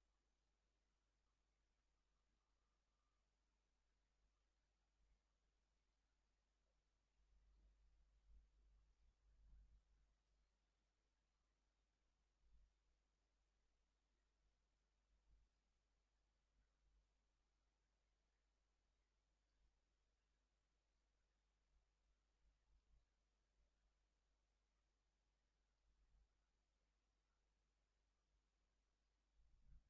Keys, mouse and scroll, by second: 0.4 click, 2.3 click, 5.7 click, 7.5 click, 8.0 Delete, 9.0 click, 9.3 Delete, 10.3 click, 13.3 shift+s, 15.5 click, 16.3 shift+s, 18.1-19.7 ctrl+drag, 22.6 ctrl+click, 23.6-26.0 ctrl+drag, 27.2-29.3 ctrl+drag, 29.5 ctrl+scroll up 2.